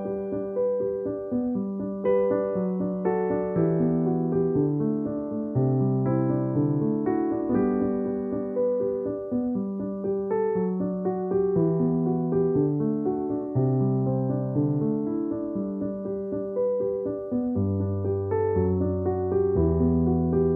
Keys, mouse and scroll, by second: 0.0-0.3 typing, 1.9-4.6 typing, 5.7 [, 6.5 space, 6.6 click, 6.8 space, 9.8-11.6 typing, 12.8-13.5 typing, 14.9-17.5 typing, 19.7-20.5 typing.